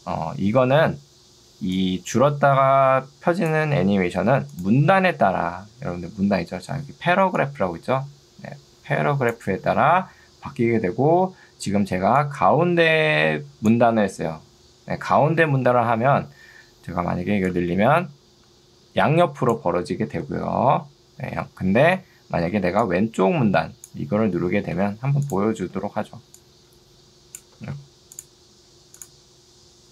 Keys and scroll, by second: 7.2 ctrl+2, 15.8 Escape, 20.2 z, 22.6 ctrl+2, 24.8 Escape, 27.8 ctrl+z.